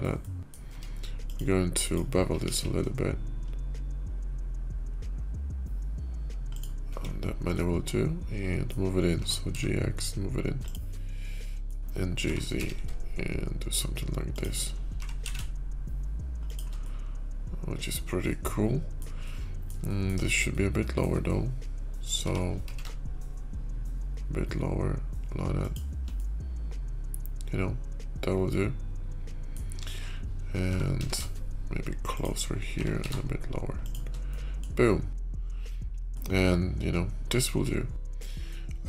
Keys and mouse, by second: 0.0 g, 0.1 click, 0.5 Tab, 1.1 click, 1.6 click, 2.3 ctrl+b, 6.8 Tab, 7.5-8.2 drag, 8.2 middle click, 9.1 g, 10.9 middle click, 14.8 g, 16.7-17.8 middle drag, 18.1-18.9 middle drag, 19.1-19.6 middle drag, 19.8 shift+middle drag, 20.4 middle click, 22.0 g, 26.1-29.2 middle drag, 30.4 g, 32.6 g, 34.2-34.5 drag, 35.9-38.4 middle drag.